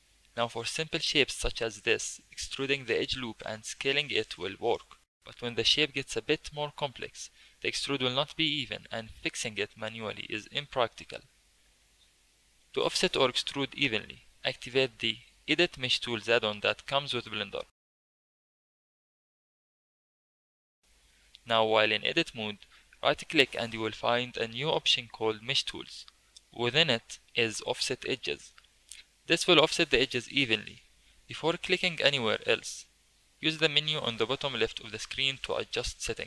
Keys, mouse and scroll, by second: 0.1 Tab, 0.4 2, 0.9 alt+click, 2.3 e, 3.4 s, 5.2 click, 5.5-6.3 shift+middle drag, 6.3 click, 6.6 Tab, 6.8 2, 7.3 alt+click, 8.3 e, 8.8 s, 10.3 ctrl+z, 10.7 ctrl+z, 12.2-15.3 drag, 22.3 2, 22.7 alt+click, 23.5-26.6 right drag, 32.8-36.2 drag.